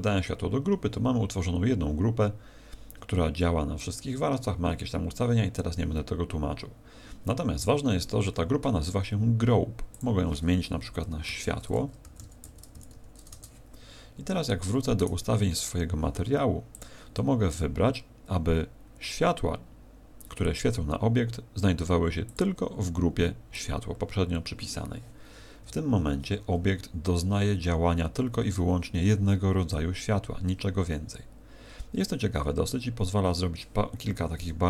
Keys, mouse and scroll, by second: 9.9 click, 15.0 right click, 16.7 click, 22.2 click.